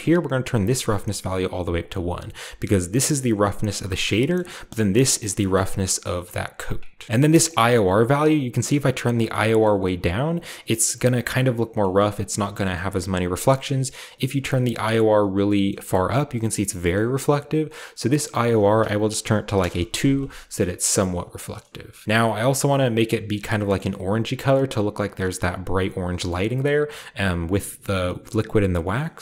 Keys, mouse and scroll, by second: 0.0-3.4 drag, 4.3 middle click, 4.3 scroll up 2, 5.1 click, 5.9 right click, 5.9 middle click, 6.9 middle click, 6.9 scroll down 2, 7.4-10.9 drag, 9.6-10.9 shift+scroll up 1, 11.8-12.3 scroll down 1, 12.6-14.6 scroll down 2, 12.7-14.6 middle drag, 15.1-16.3 drag, 15.3-16.0 scroll down 3, 15.4 middle click, 15.9-16.3 middle drag, 16.0-16.9 scroll up 2, 16.9-18.2 middle drag, 16.9-18.2 scroll up 1, 18.2-19.5 drag, 19.5 2, 19.5 Return, 20.3 scroll down 1, 20.5 middle click, 21.2 scroll down 1, 21.5 middle click, 22.1-22.8 middle drag, 22.8 click, 22.8 scroll down 1, 26.2 scroll up 1, 26.3-27.8 middle drag, 28.0 scroll up 2, 28.8 scroll down 3, 28.9-29.2 middle drag.